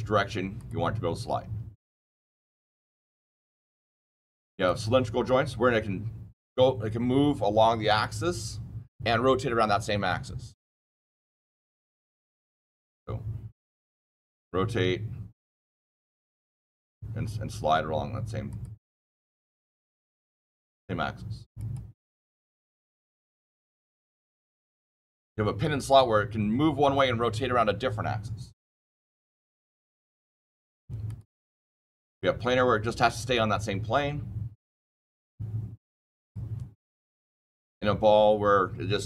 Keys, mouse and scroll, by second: 0.5 click, 1.9 click, 2.9 click, 4.6 click, 12.3 click, 16.3 click, 18.4 click, 19.8 click, 21.5 click, 22.7 click, 23.9 click, 24.6 click, 25.5 click, 31.0 click, 32.0 click, 36.1 click, 36.7 click, 37.6 click.